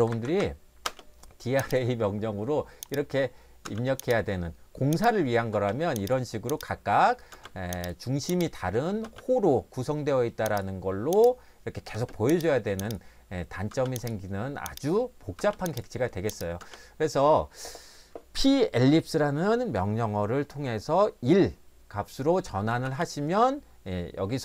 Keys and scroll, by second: 0.0-0.8 typing, 3.6 space, 5.6 space, 7.3 space, 9.0 space, 12.0 space, 13.7 space, 15.4 space, 16.6 space, 22.8 space.